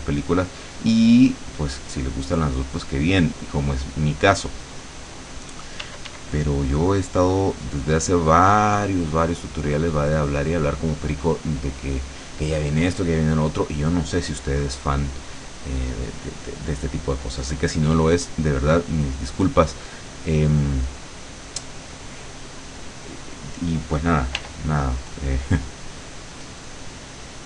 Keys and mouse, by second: 0.5 click, 2.1-3.3 drag, 4.4 click, 5.9 d, 6.5-10.7 drag, 24.5 r, 26.4 click.